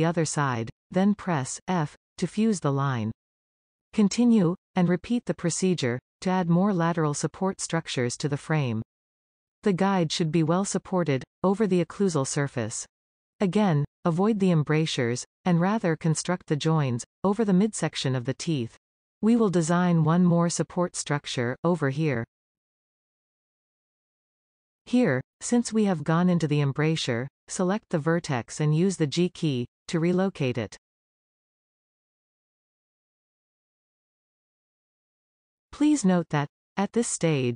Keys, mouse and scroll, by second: 1.0 f, 1.8 scroll down 2, 2.5-3.9 shift+middle drag, 3.9 click, 4.8 e, 5.8 e, 7.7 shift+click, 8.5 f, 9.0-12.1 middle drag, 12.1 click, 13.1 e, 14.7 e, 16.5 shift+click, 17.3 f, 19.6 e, 20.5 e, 22.0 shift+click, 22.8 f, 23.1 middle click, 23.9 scroll up 1, 24.2-28.2 middle drag, 28.2 click, 30.1 g, 31.5 click, 31.6 g, 32.0-33.4 middle drag, 33.4-33.8 scroll up 3, 33.8-37.5 middle drag.